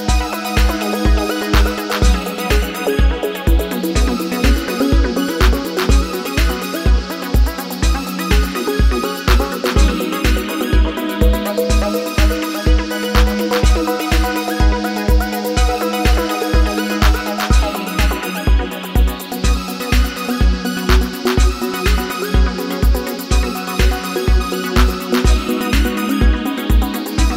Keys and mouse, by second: 1.4 click, 2.0 g, 3.5 g, 6.2 g, 9.4 shift+click, 10.5-13.6 right drag, 13.6-19.1 drag, 19.9 g, 24.0 click, 24.9 g.